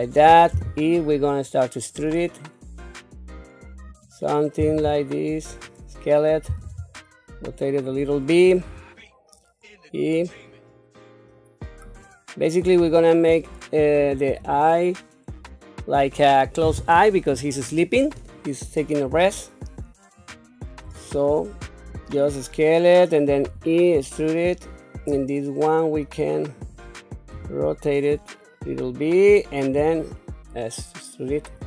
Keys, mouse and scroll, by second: 0.5 e, 4.6 s, 6.5 r, 8.6 e, 12.8 s, 19.1 r, 20.9 s, 23.4 e, 27.5 r, 29.7 s.